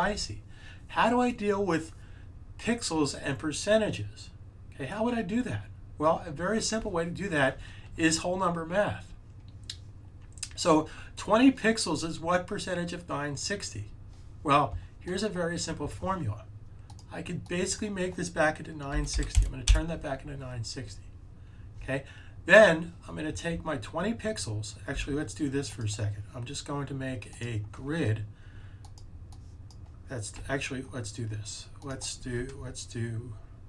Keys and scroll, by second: 18.6-19.8 typing, 24.8 z, 27.7 z.